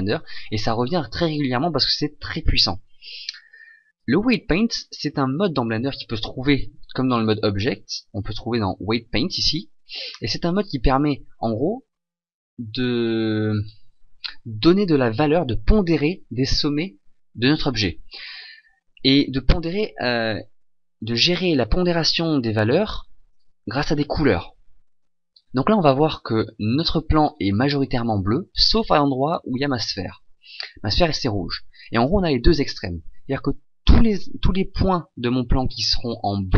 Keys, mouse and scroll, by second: 7.1 click.